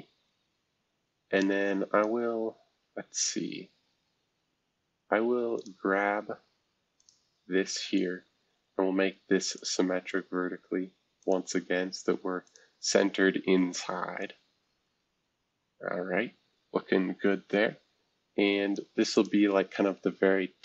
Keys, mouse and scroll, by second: 5.6-7.7 drag, 7.7 Escape, 8.3 s, 9.5-11.1 drag, 11.2-13.2 drag, 13.2 Escape, 14.2-20.6 drag.